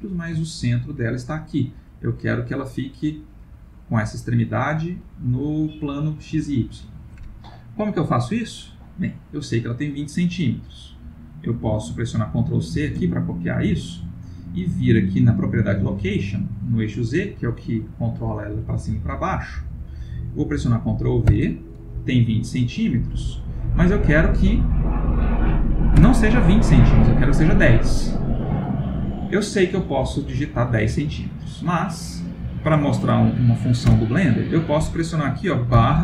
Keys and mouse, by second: 2.1 middle click, 2.7 middle click, 2.9-6.6 middle click, 12.8 ctrl+c, 15.9 click, 19.5 click, 26.9 middle click, 28.1 middle click, 31.4 click.